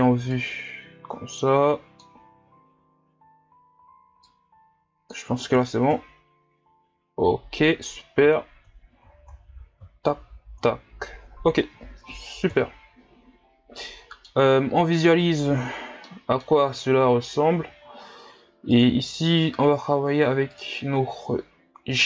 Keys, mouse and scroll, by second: 0.3-2.7 drag, 2.7-4.3 scroll down 2, 4.3-5.9 drag, 5.9 KP_0, 7.2-7.8 scroll down 2, 10.3-12.6 scroll up 1, 12.6 KP_0, 13.6-13.9 scroll down 2, 13.9-14.5 middle drag, 14.5-14.9 scroll up 2, 14.9-15.7 middle drag, 15.7-16.1 scroll down 4, 16.1-22.0 middle drag.